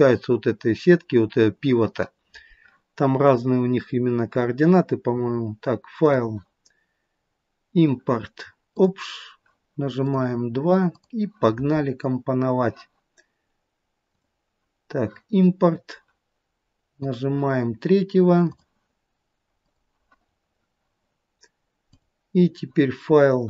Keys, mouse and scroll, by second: 6.0 click, 12.3-14.2 scroll down 1, 14.2 click, 21.9 click.